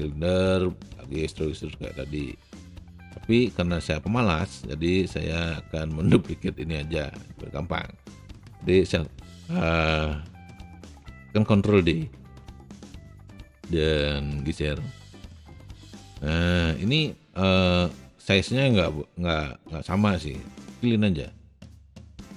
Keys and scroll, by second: 11.8 ctrl+d, 20.2 r.